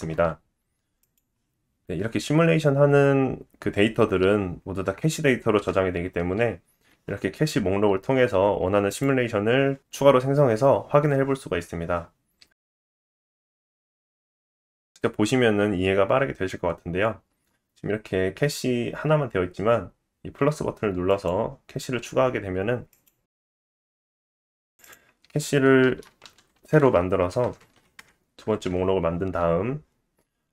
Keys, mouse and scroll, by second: 2.0 space, 6.6 space, 8.9-10.7 drag, 8.9-10.7 middle drag, 8.9-10.7 right drag, 10.7 space, 21.1 click, 22.9 click, 24.7 click, 27.6 KP_0, 30.1-30.5 scroll up 9.